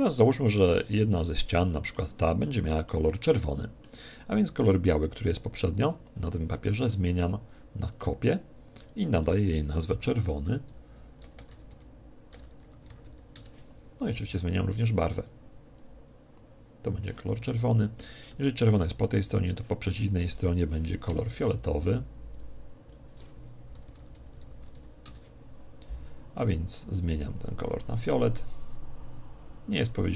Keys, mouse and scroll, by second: 0.5 right click, 1.1-4.8 middle drag, 4.9 click, 7.9-10.5 drag, 15.1 click, 17.5-19.9 middle drag, 20.2 right click, 22.3 click, 26.9 click.